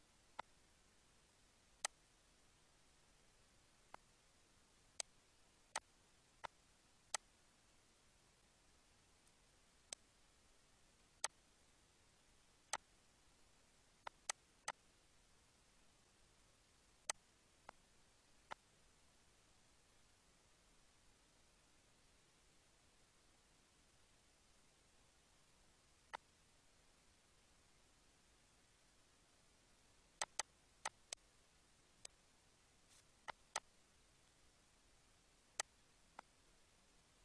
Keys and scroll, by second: 32.8 ctrl+s.